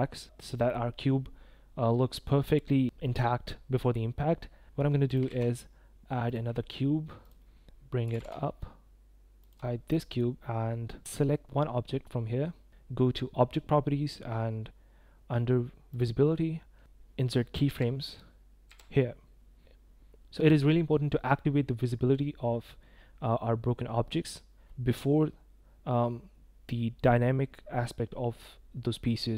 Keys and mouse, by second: 5.2 shift+a, 8.0 g, 8.1 z, 10.8 click, 12.5 click, 17.6 i, 18.6 i.